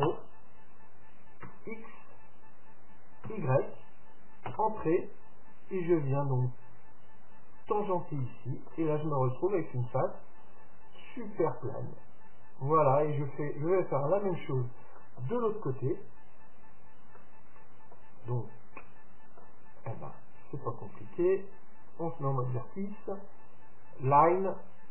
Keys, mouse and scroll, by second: 6.0-7.8 drag, 8.3-12.1 middle drag, 12.4-13.0 scroll up 1, 13.0-17.0 middle drag, 17.2-21.9 middle drag, 22.0-23.7 drag, 24.2-24.9 drag.